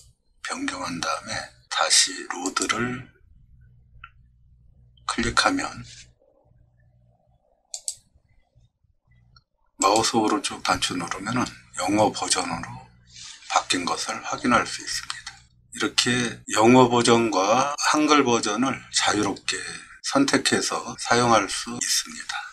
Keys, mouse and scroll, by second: 2.5 click, 7.7 click, 9.8 right click.